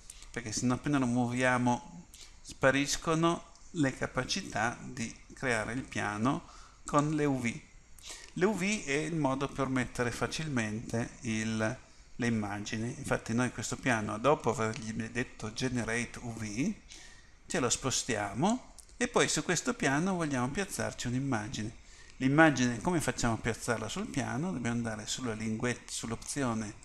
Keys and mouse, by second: 7.0-9.8 drag, 17.7-19.7 drag, 19.7-26.8 middle drag.